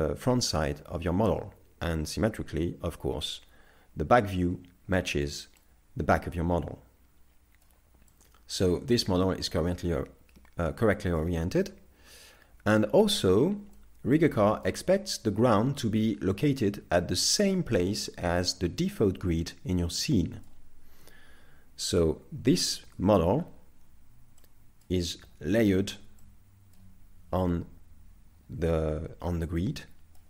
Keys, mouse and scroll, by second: 2.9 ctrl+KP_1, 4.9 shift+middle click, 5.6 middle click, 8.2 middle click, 12.5 KP_3, 13.8 middle click, 14.4 shift+middle click, 15.3 middle click, 19.7 middle click, 21.7 KP_3, 22.9 KP_5, 23.3-24.4 scroll up 6, 24.4 shift+middle click, 26.2 middle click, 28.3 scroll down 2, 29.6 middle click.